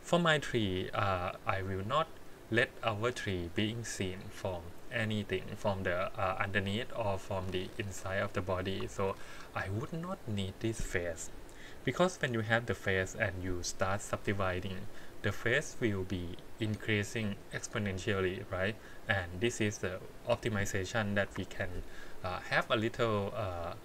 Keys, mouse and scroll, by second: 7.1 middle click, 9.1 ctrl+z, 9.6 middle click, 12.8 KP_1, 14.0 middle click, 14.4 middle click, 21.3 KP_1.